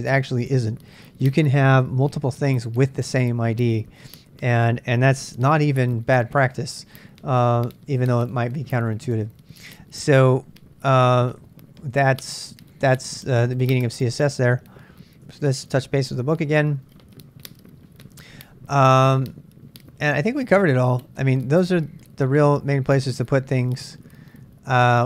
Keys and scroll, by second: 11.2 ctrl+[, 11.3 ctrl+j, 13.7 super+Tab, 15.3 super+Tab, 16.6 super+Tab.